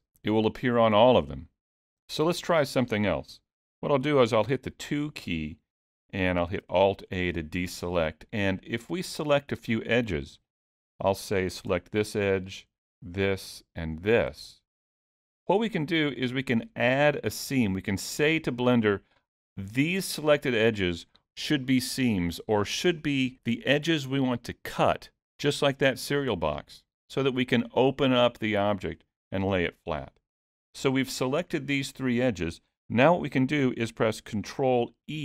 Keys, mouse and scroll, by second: 3.3 middle click, 4.5 2, 5.3-6.3 scroll up 2, 6.6 alt+a, 7.1 middle click, 10.5 click, 12.9 shift+click, 14.5 middle click, 31.2 middle click, 35.1 ctrl+e.